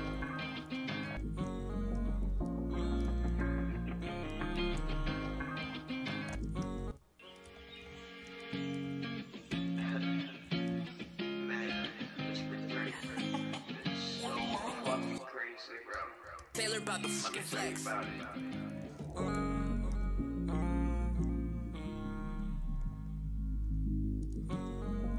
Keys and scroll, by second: 6.2 Return, 6.3 typing, 6.6 super+s, 9.2-10.0 typing, 10.7 super+s, 14.5 shift+s, 15.9 shift+s, 18.1 shift+=, 18.2 shift+=, 18.4 shift+=, 19.3 F4, 24.5 e.